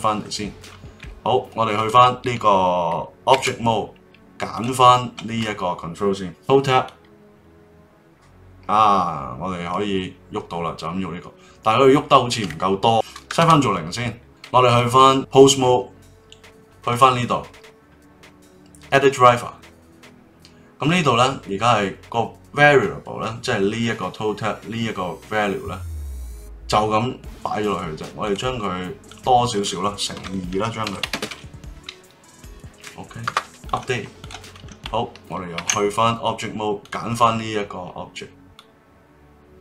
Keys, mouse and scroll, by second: 0.2-1.7 middle drag, 1.7 click, 3.3 ctrl+Tab, 4.5 click, 6.8-9.8 drag, 12.8-14.2 drag, 14.6 click, 15.1 ctrl+Tab, 16.9-19.9 right drag, 34.2 click, 35.6 ctrl+Tab, 36.8 click, 38.6-39.6 drag.